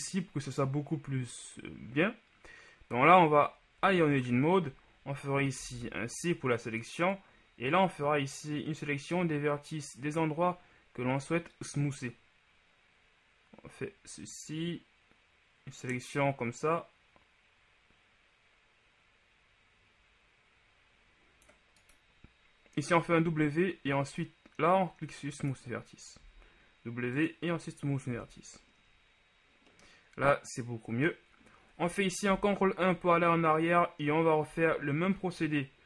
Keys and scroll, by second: 4.0 Tab, 5.8 c, 23.5 w, 26.6 w, 28.3 Tab, 32.5 ctrl+KP_1, 34.7 Tab.